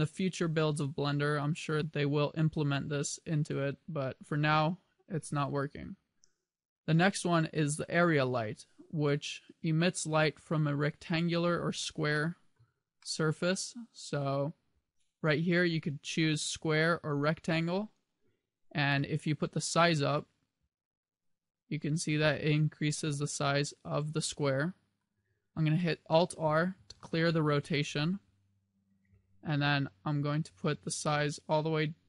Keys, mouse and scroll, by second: 8.0 click, 9.4-10.1 scroll up 3, 10.1-10.9 scroll up 1, 11.9 shift+middle click, 13.1 middle click, 13.2 middle click, 16.2 click, 19.2 click, 19.8 click, 23.7 middle click, 24.7 middle click, 26.2 alt+r, 30.2 click.